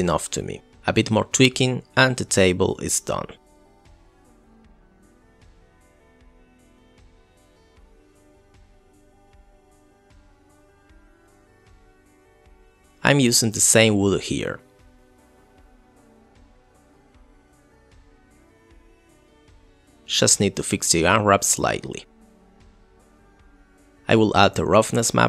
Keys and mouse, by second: 0.4 ctrl+z, 0.4 middle click, 1.3 g, 1.7 click, 3.0 click, 3.7 middle click, 5.0 click, 5.5 click, 6.3 middle click, 6.7 click, 7.5 middle click, 7.8 click, 8.2 r, 8.9 middle click, 9.2 middle click, 9.5-10.3 middle drag, 10.6 click, 11.3 click, 13.1 click, 13.3 click, 14.0 click, 14.2 middle click, 14.5 click, 14.8 click, 15.7 click, 16.1 middle drag, 16.6 click, 19.9 click, 20.3 click, 21.1 click, 23.3 click, 23.7 click, 23.8 click.